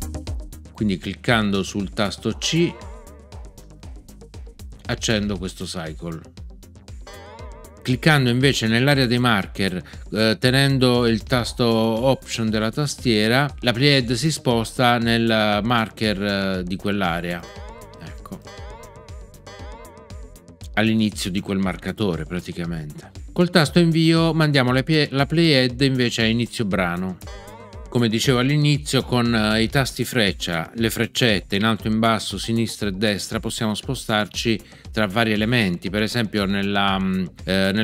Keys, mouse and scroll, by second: 2.4 c, 7.0 c, 17.4 alt+click, 27.2 Return.